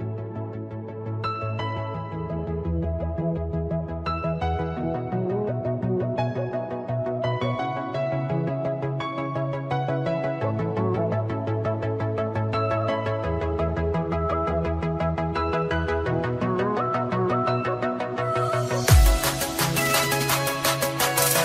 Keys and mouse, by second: 1.1 click, 6.4 click, 9.7 click, 12.9 click, 14.8 click, 15.1 click, 15.9 click, 15.9 a, 17.1 click, 17.1 a, 17.5 click, 17.5 a, 17.9 click, 18.8 y, 20.1 click.